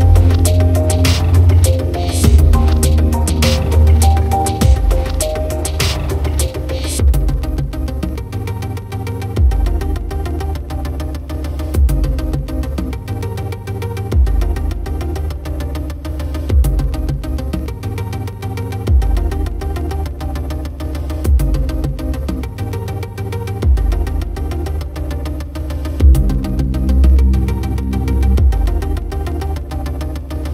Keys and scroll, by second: 24.5-27.4 typing.